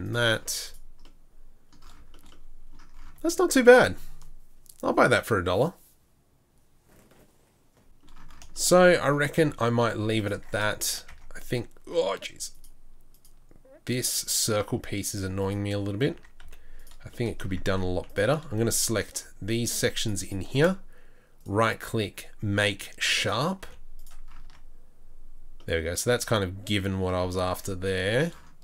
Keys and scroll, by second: 9.5 Tab, 10.0 Tab, 11.6 Tab, 12.1 Tab, 16.1 Tab, 16.4 z, 17.7 Tab, 17.7 z, 17.9 2, 23.6 z, 24.5 Tab.